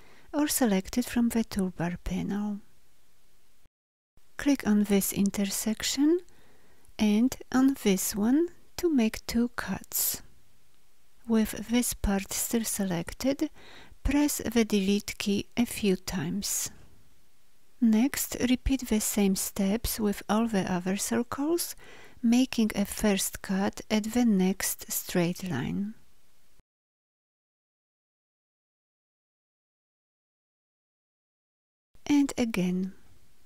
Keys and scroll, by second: 14.0 Delete, 30.0 Delete.